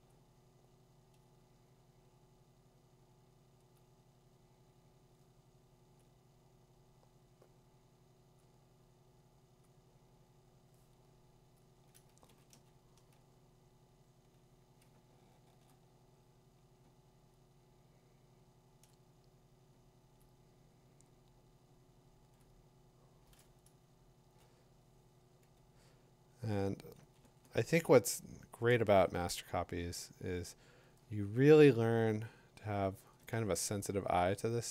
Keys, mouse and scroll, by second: 0.0 click, 1.2 click, 3.7 click, 6.0 click, 9.6 click, 11.5 click, 12.5 2, 15.7 click, 17.5 click, 18.9 click, 20.2 click, 22.4 click, 24.2 [, 27.0 ], 27.2 ], 28.7 ], 29.0 ], 30.3 click, 32.0 click, 33.6 3, 33.9 4.